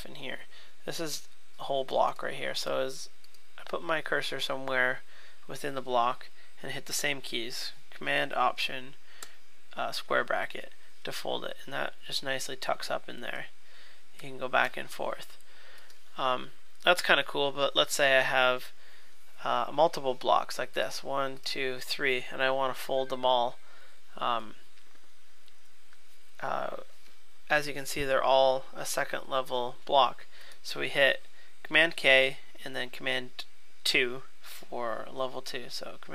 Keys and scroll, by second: 9.2 alt+super+[, 13.3 alt+super+], 14.2 alt+super+[, 14.6 alt+super+].